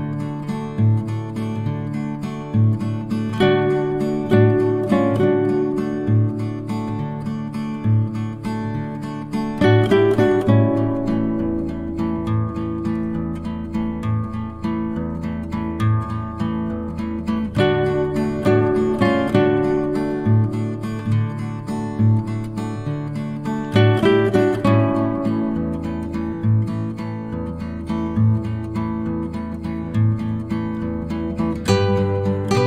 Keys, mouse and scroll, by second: 4.5 click, 6.3 r, 7.1-9.0 drag, 11.0-11.9 typing, 13.1-16.6 drag, 19.5-22.3 drag, 23.3-24.0 ctrl+scroll down 2, 24.0 click, 26.1 shift+click, 27.1 click, 29.7 shift+click, 31.1 shift+click, 31.9 click.